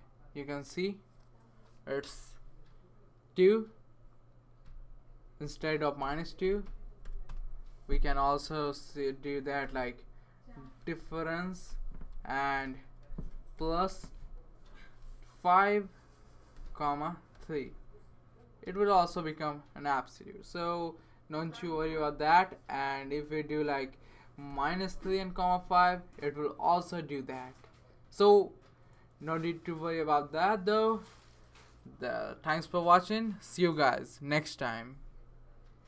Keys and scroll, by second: 6.0 Return, 6.4 Return, 7.0 |, 7.3 Return, 9.1-13.1 typing, 11.7 Return, 13.6 Left, 13.9 Left, 14.7-15.5 typing, 16.5 ,, 17.3 3, 24.5 -.